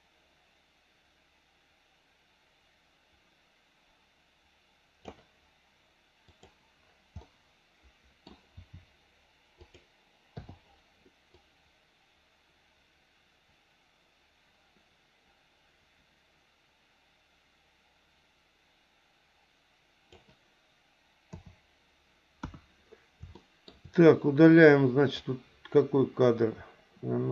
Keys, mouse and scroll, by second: 6.3 click, 7.2-8.2 middle drag, 8.5 r, 10.4 i, 11.4-20.2 drag, 21.3 KP_7, 22.4 KP_1, 23.4 shift+middle click, 24.5 click.